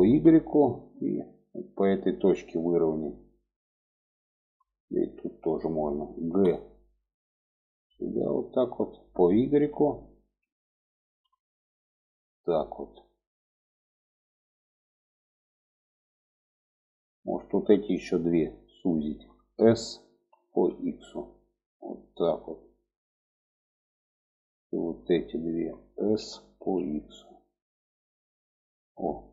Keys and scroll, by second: 5.6 g, 19.4 s, 25.5 s.